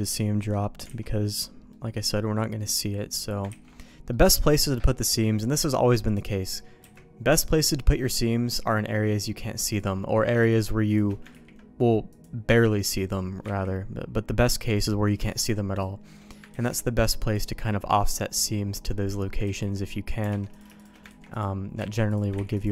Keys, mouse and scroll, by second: 0.9 alt+a, 1.7 middle click, 2.4 middle click, 3.0 middle click, 3.5 ctrl+s, 4.1 middle click, 6.8 KP_Decimal, 8.0 middle click, 9.8 click, 10.5 shift+click, 11.3 ctrl+e, 12.9 middle click, 13.6 ctrl+z, 14.8 click, 15.3 shift+click, 16.5 ctrl+e, 18.0 middle click, 18.9 middle click, 19.4 ctrl+z, 20.3 alt+a, 20.5 shift+click, 21.1 ctrl+e, 21.9 ctrl+z, 22.1 click, 22.5 ctrl+e.